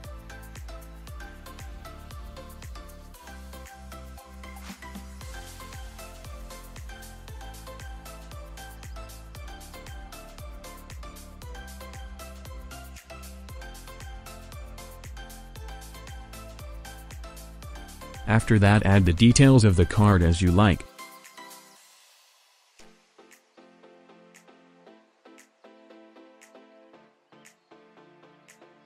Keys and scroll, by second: 1.6 space, 5.3 space, 24.5 7, 24.5 0, 24.7 Return, 25.0 alt+space, 26.2 space, 26.8 ctrl+alt+v, 28.8 7.